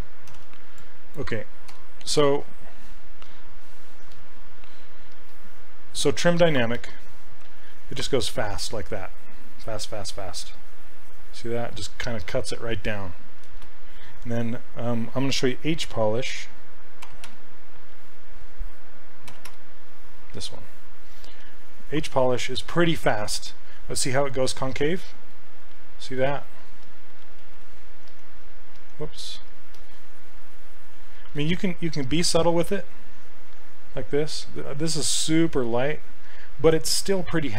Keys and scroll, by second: 0.3 ctrl+d, 1.7 q, 4.1 s, 13.5 ctrl+z, 16.8-17.8 typing, 19.1-20.0 typing, 26.9 s, 27.5 ctrl+z, 28.1 s, 28.8 s.